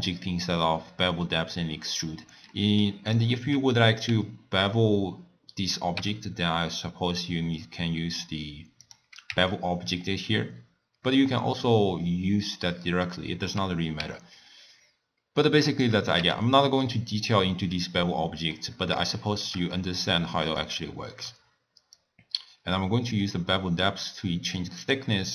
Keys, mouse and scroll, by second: 2.6-3.2 middle drag, 3.2 click, 6.0 n, 8.8 click, 9.3 n, 14.0 n, 15.8 click, 16.1 n, 18.6-22.0 middle drag, 22.0-25.0 drag.